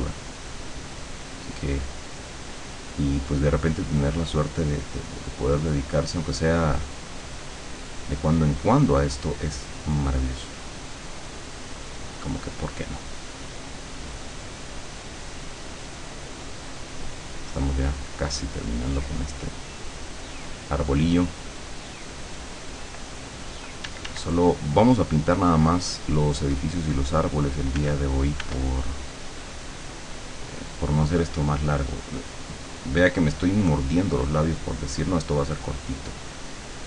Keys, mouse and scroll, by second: 3.1-17.3 drag, 18.0-22.9 drag, 23.9 d, 24.7-28.8 drag, 27.8 f, 29.1-36.8 drag.